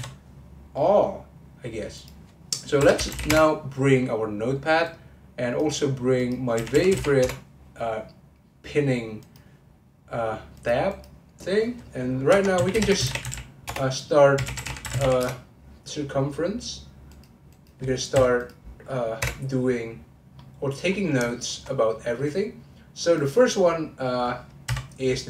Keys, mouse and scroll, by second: 0.4-0.7 scroll up 1, 0.7-3.8 middle drag, 20.4 middle click, 20.9-21.2 scroll up 2, 21.2-23.1 shift+middle drag, 23.1 click, 24.6 n.